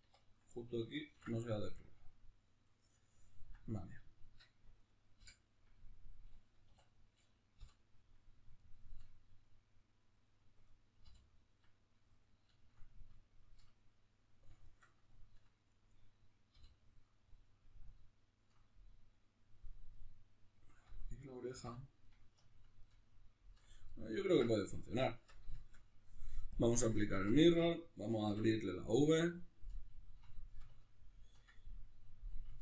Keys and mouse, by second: 0.0 2, 0.2 right click, 1.1 ctrl+e, 3.1-4.7 ctrl+middle drag, 4.7 right click, 5.2 l, 6.7 3, 6.8 right click, 7.5 l, 8.6-10.7 shift+middle drag, 10.7 right click, 11.0 l, 11.9-15.7 middle drag, 15.7 right click, 16.5 l, 17.1-21.1 middle drag, 21.1 right click, 21.6 l, 22.1-26.5 middle drag, 25.1 Tab, 26.5-29.4 drag, 27.1 Tab, 29.4-32.6 ctrl+middle drag.